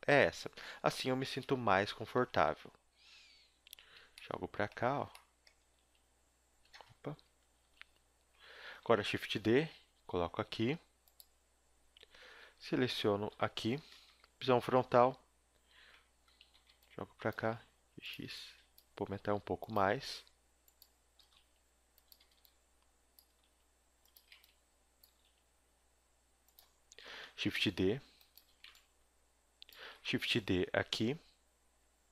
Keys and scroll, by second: 0.4 z, 1.4 KP_1, 2.2 Tab, 2.5 z, 3.1 s, 4.8 z, 5.6 g, 7.1 KP_7, 7.6 z, 9.0 shift+d, 12.3 ;, 13.3 l, 14.1 KP_1, 15.0 z, 16.3-19.7 typing, 21.1-25.0 typing, 27.0 shift+d, 28.5 a, 28.6 b, 29.9 shift+d.